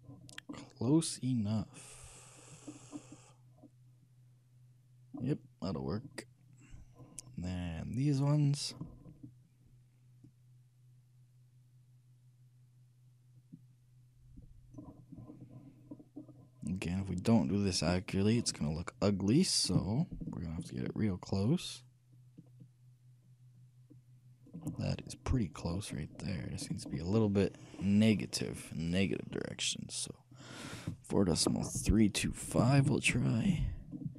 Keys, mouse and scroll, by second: 0.7-2.9 middle drag, 2.9 scroll down 1, 3.0-3.7 scroll up 1, 3.7-5.4 scroll down 1, 5.4 scroll down 1, 5.5-8.3 middle drag, 8.3-9.9 drag, 10.5-12.1 drag, 15.4-20.0 middle drag, 20.5-22.7 shift+drag, 25.2-30.5 middle drag, 30.5-32.4 drag.